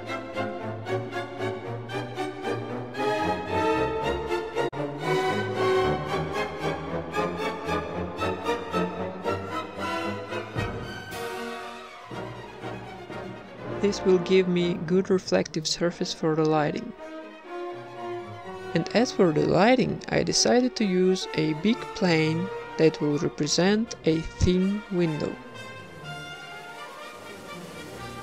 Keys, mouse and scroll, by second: 2.5 shift+d, 5.5 ctrl+s, 5.5 shift+a, 8.4 shift+a, 8.8-13.3 drag, 14.6 KP_1, 14.8 shift+a, 16.7 r, 17.2 s, 22.1 g, 22.3 r.